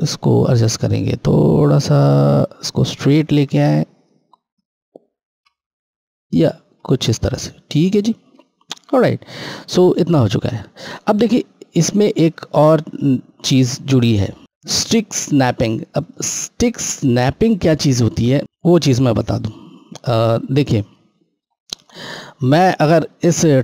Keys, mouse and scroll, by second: 9.9 click, 12.7 click, 15.7 click, 18.4 click, 19.1 scroll, 19.3-19.8 scroll down 1, 21.0-22.3 scroll, 22.4 click.